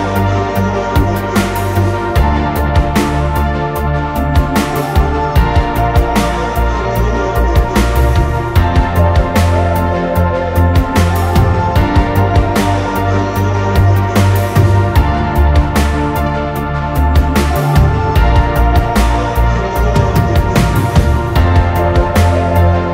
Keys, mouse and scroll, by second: 0.6 scroll down 1, 0.7 middle click, 2.9 double click, 5.0 scroll up 1, 6.0 Delete, 6.3 middle click, 7.0 scroll up 1, 7.3 scroll down 1, 7.6 middle click, 8.3 scroll down 1, 8.5 space, 10.1 typing, 11.8 space, 12.1 middle click, 12.5 scroll up 1, 12.7 middle click, 13.1 space, 13.4 scroll up 1, 13.6 middle click, 14.5 scroll down 1, 14.7 middle click, 14.8-15.4 typing, 16.4 Return, 16.6 space, 17.7 middle click, 18.0-18.5 scroll down 1, 18.5 double click, 18.9 right click, 20.1 scroll down 1, 20.3 middle click, 21.7 scroll up 1, 22.0 middle click, 22.4 scroll down 1, 22.7 middle click.